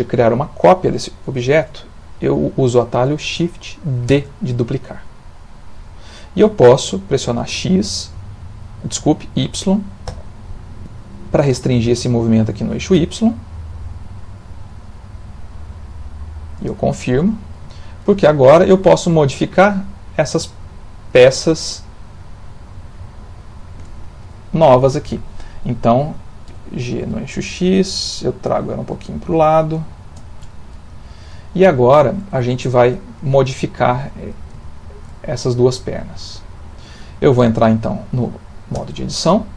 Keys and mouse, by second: 4.2 shift+d, 17.1 middle click, 17.7 ctrl+middle click, 18.2 shift+middle click, 18.8 ctrl+middle click, 19.7 middle click, 20.6 shift+middle click, 21.4 middle click, 23.2 shift+middle click, 26.4 g, 30.5 middle click, 31.4 ctrl+middle click, 31.8 shift+middle click, 32.4 ctrl+middle click, 33.3 middle click, 34.6 shift+middle click, 35.6 middle click, 38.8 Tab.